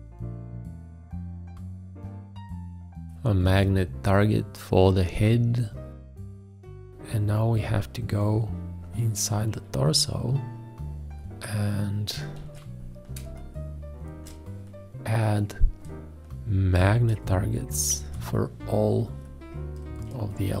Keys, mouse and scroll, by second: 2.2 shift+`, 4.1 click, 12.5 ctrl+a, 13.3 space, 18.0 shift+`.